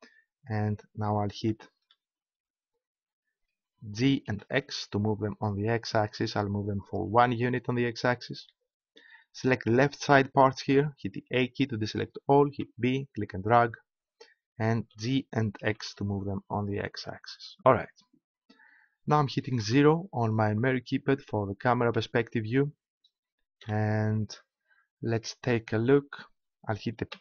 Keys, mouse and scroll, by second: 3.9 g, 7.0-10.1 drag, 11.2 a, 12.5 b, 14.9 g, 16.9-18.9 drag, 19.6 KP_0, 23.6 t.